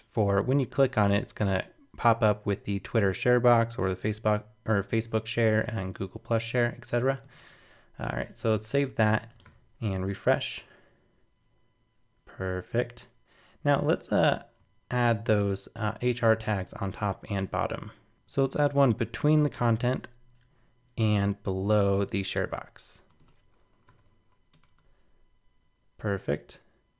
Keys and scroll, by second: 8.0 super+s, 8.3 super+Tab, 9.4 super+r, 16.7 super+Tab, 24.8 super+r.